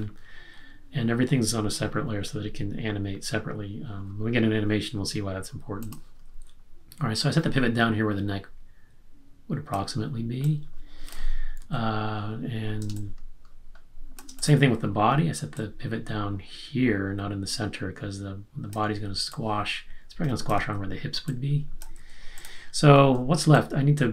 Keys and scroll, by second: 11.5 super+z, 13.0 space, 20.5 super+z, 23.5 space.